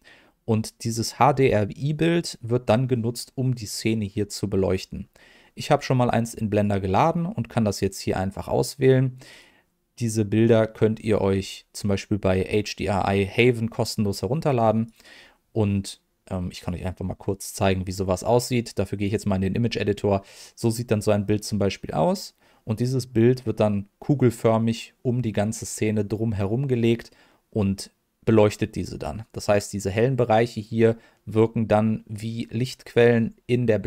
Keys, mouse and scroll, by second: 6.5-9.4 drag, 13.9 click, 16.5-18.5 drag.